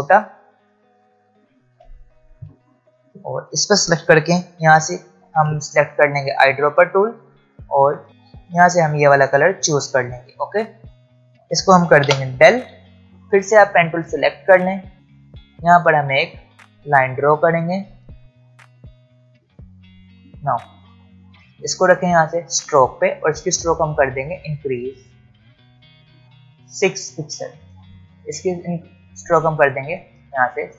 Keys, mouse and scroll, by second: 1.0 alt+shift+click, 2.4 alt+scroll up 1, 3.1 click, 6.1 ctrl+alt+scroll up 1, 7.3 ctrl+alt+scroll down 1, 8.5 alt+scroll down 1, 8.7 alt+scroll up 1, 10.0 alt+scroll up 1, 10.8 v, 11.2 click, 13.1 click, 16.4 click, 22.4 click, 23.9-26.7 scroll up 1, 29.6 ctrl+alt+scroll up 1.